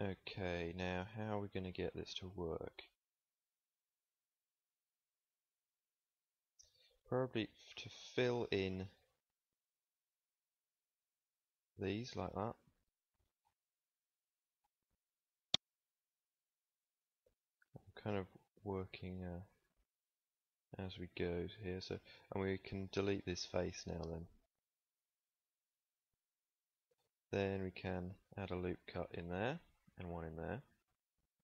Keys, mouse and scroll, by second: 1.4-3.7 middle drag, 8.0-9.1 middle drag, 9.1 shift+KP_Decimal, 11.9 f, 16.8 f, 19.5 middle click, 21.0 middle click, 22.8 x, 25.5 middle click, 27.5 ctrl+r, 29.9 r, 31.3 KP_1.